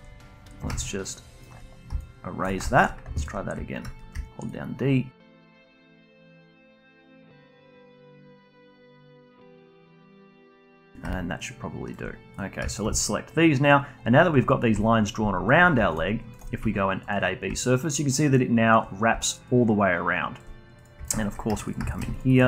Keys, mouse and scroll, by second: 1.0-1.9 shift+right drag, 1.9 d, 2.0 right click, 2.6-4.1 alt+drag, 4.1 d, 4.5-6.2 drag, 6.2 d, 6.4-7.9 drag, 7.9 d, 8.3 click, 8.9 d, 9.2 alt+click, 9.9 d, 10.2 click, 10.8 d, 11.1-12.3 alt+drag, 12.7 shift+drag, 12.9-16.3 alt+drag, 16.3-17.6 shift+right drag, 17.6-20.8 alt+drag, 21.0 shift+drag, 21.5 2, 21.6 drag, 21.9 shift+drag, 22.1-22.4 alt+drag.